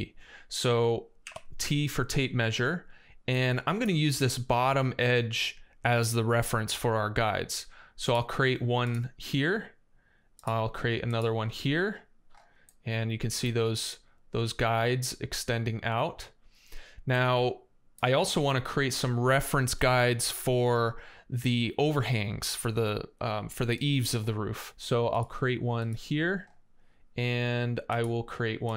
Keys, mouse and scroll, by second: 1.0 t, 12.8 middle click, 14.1 right click, 16.1 right click, 24.9 click, 25.6 click, 26.8 right click.